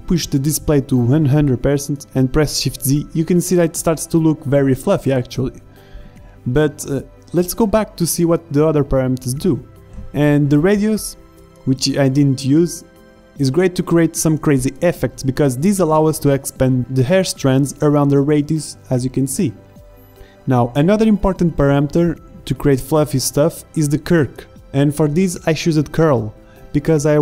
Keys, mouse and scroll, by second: 0.0 click, 1.6 shift+z, 6.5 middle click, 8.3-9.8 middle drag, 11.4 middle click, 12.4 middle click, 13.0 shift+z, 15.9 z, 16.2 middle click, 16.3-17.2 middle drag, 17.4-18.1 drag, 18.9 KP_Enter, 22.5 z, 24.1-26.1 drag, 26.9-27.2 drag.